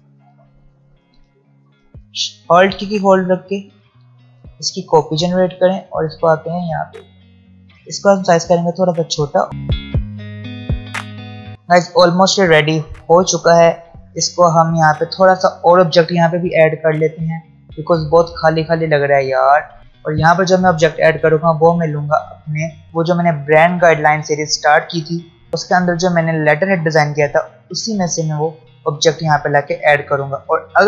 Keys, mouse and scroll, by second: 2.3-9.8 alt+drag, 9.8 click, 10.3 alt+scroll down 1, 10.4 space, 10.6-11.1 alt+scroll up 2, 10.7 click, 10.9 alt+shift+click, 11.1 alt+scroll down 1, 11.2 click, 11.4 alt+scroll up 1, 11.5 space.